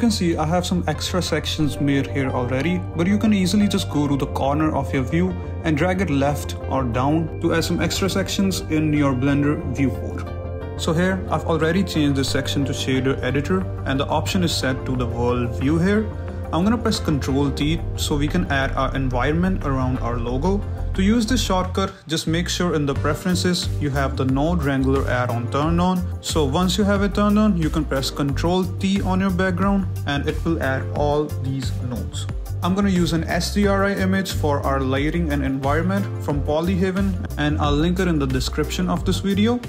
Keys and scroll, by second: 18.3 ctrl+t, 27.5 ctrl+z, 29.0 ctrl+t, 38.4 alt+Tab.